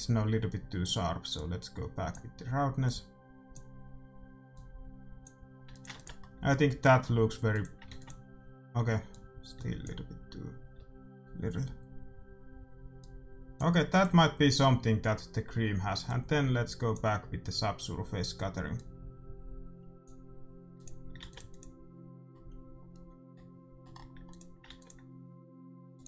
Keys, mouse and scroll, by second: 5.9 ctrl+s, 6.4 middle click, 7.9 ctrl+s, 12.9-14.8 drag, 16.0-17.8 drag, 18.8-20.6 drag, 21.0-23.3 drag, 21.3 ctrl+s, 23.3-25.4 middle drag, 24.4-26.0 drag, 24.8 ctrl+s.